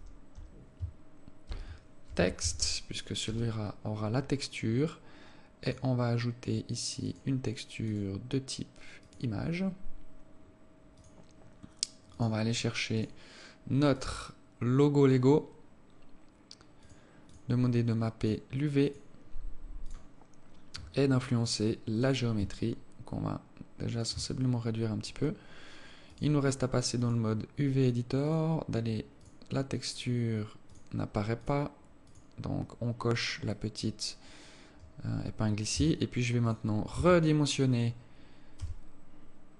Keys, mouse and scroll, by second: 5.9 click, 7.3 click, 8.2 click, 10.7-11.3 scroll down 3, 11.3 click, 14.3 click, 15.3-15.8 scroll down 4, 16.2-17.2 scroll down 3, 17.2 click, 17.6 click, 19.1 click, 20.1 click, 21.3-21.7 scroll down 3, 22.3 click, 22.9 shift+click, 24.7 scroll up 4, 25.2-25.6 scroll down 4.